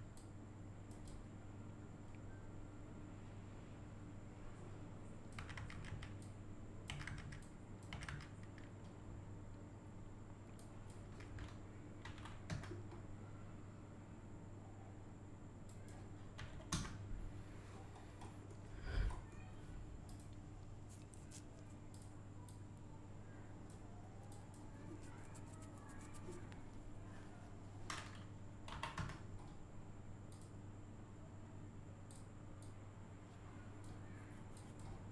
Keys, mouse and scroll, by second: 0.1-5.4 drag, 6.2 click, 7.4 click, 10.6 click, 15.7 click, 17.6-18.2 scroll down 1, 18.2 middle click, 18.8 scroll up 1, 19.1 middle click, 20.1 click, 22.0-24.3 drag, 30.3 click, 32.1-34.6 drag.